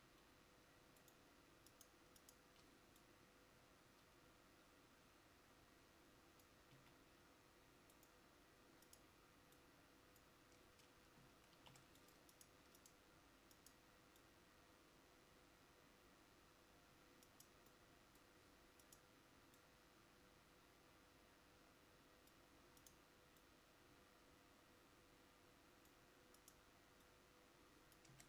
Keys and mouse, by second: 0.0 a, 6.8 a, 11.7 ctrl+r.